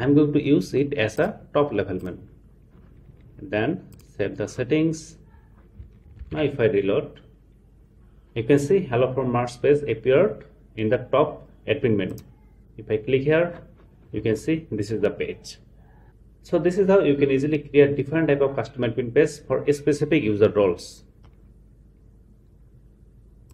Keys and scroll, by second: 6.2 super+r.